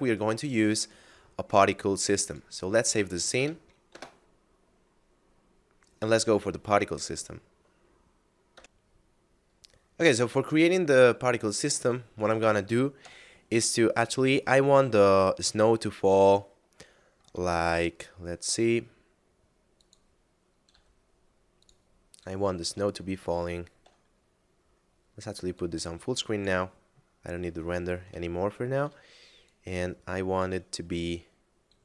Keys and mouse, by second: 2.3 click, 3.4 KP_Add, 3.7 Return, 8.5 F10, 8.6 F9, 11.3 shift+middle click, 13.0 KP_7, 16.1 middle click, 17.6 shift+a, 19.7 click, 20.7 s, 21.6 click, 23.1 shift+middle click, 25.5 click, 27.1 middle click, 28.3 shift+middle click, 29.5 click.